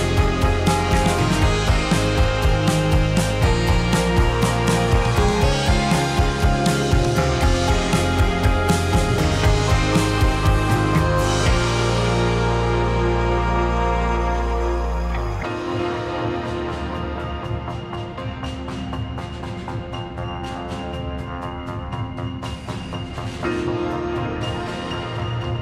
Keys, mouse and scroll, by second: 0.3 r, 1.0 click, 1.1-2.4 middle drag, 2.4 click, 2.7 r, 3.4 click, 3.5-6.8 middle drag, 6.8 click, 7.9 `, 8.4 drag, 9.7 r, 12.5 alt+d, 15.9 shift+r, 16.1 shift+r, 17.0-17.4 middle drag, 17.4 drag, 17.6-22.2 middle drag, 22.2 drag, 22.5-23.1 middle drag, 23.1 r, 24.2 s, 24.8 drag, 25.0-25.6 middle drag.